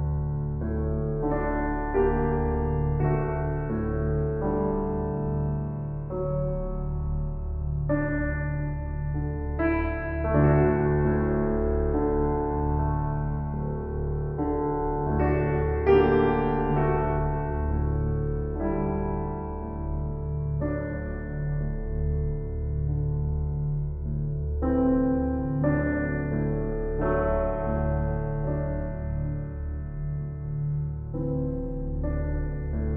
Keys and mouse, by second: 1.4-1.8 typing, 3.0-4.3 drag, 4.3 Tab, 5.0-8.1 drag, 8.1 a, 8.4 s, 8.7 x, 10.2 Escape, 11.0 click, 11.0 typing, 12.2 g, 12.6 x, 16.4 click, 17.3 Tab, 18.3 ctrl+s, 22.3 shift+click, 23.5 click, 24.9 click, 25.6 click, 27.1-31.0 typing, 31.3 Return.